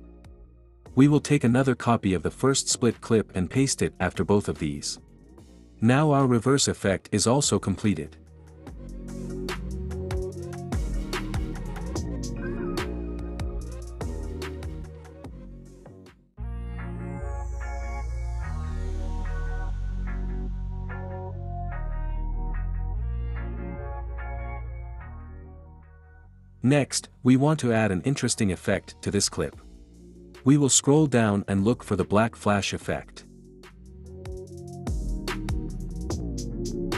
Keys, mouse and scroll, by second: 0.1 ctrl+v, 1.0-2.0 drag, 2.7-3.7 drag, 3.7 space, 12.9 space, 16.6-17.6 drag, 17.9-19.6 drag, 21.5-22.5 drag, 25.9 click, 34.5 click.